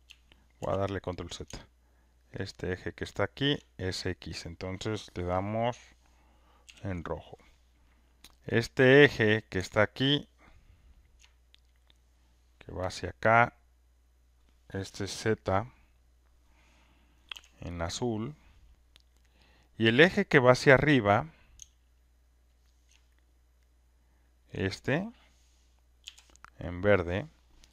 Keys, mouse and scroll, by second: 0.6 ctrl+z, 6.6 ctrl+F1, 7.1 click, 9.7-12.3 ctrl+drag, 16.3 ctrl+F1, 17.3 b, 17.9 click, 19.2 click, 26.0 ctrl+F1, 26.0 g, 26.7 click, 27.2-27.7 ctrl+drag.